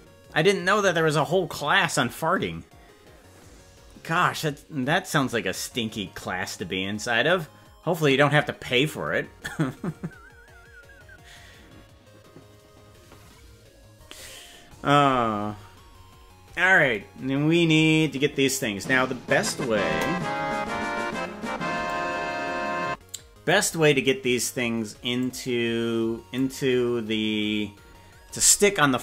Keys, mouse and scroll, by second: 18.6 right click, 20.0 KP_0, 21.9-23.5 drag, 24.0-24.4 scroll down 4, 25.1-26.4 drag.